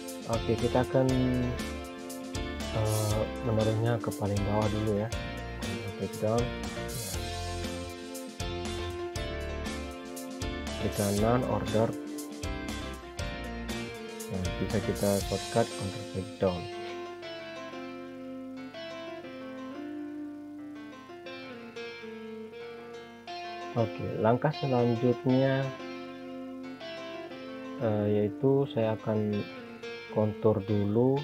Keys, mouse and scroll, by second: 4.6 click, 6.4 right click, 8.3 click, 11.9 click, 13.4 ctrl+Page_Down, 19.1 click, 26.0 scroll down 1, 26.5-27.4 scroll up 1, 28.5 click, 28.9 scroll up 1, 29.6 click, 31.1 scroll down 1.